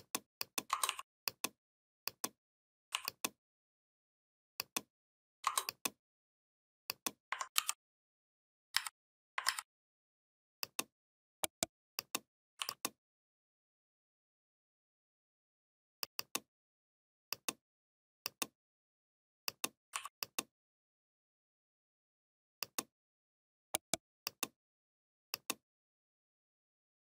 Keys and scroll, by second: 7.4 ctrl+g, 8.5 a, 9.3 ctrl+a.